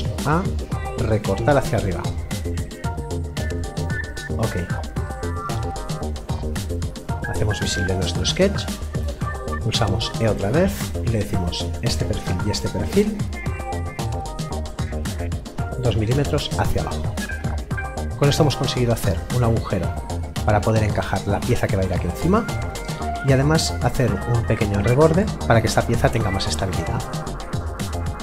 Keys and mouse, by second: 0.0 middle click, 1.2 click, 9.7 e, 11.1 click, 18.1 middle click, 25.2 middle click.